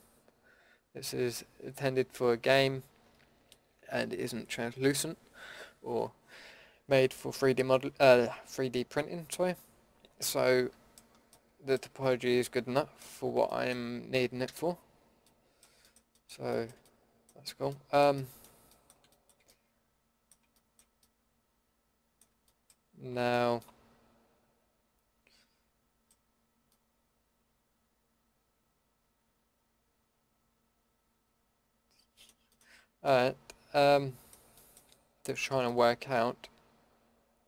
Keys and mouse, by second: 10.3-14.4 middle drag, 14.4 a, 16.8 middle drag, 28.0-28.7 middle drag, 32.8-35.4 middle drag, 35.7 middle click.